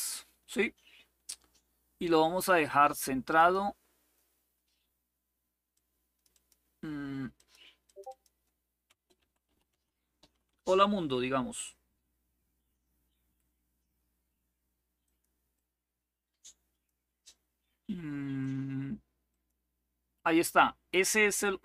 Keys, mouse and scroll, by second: 2.0 click, 3.1 click, 5.4 click, 7.1 click, 7.6 click, 8.6-10.6 typing, 14.7 click, 15.3-16.6 drag, 18.1 click, 19.0 click.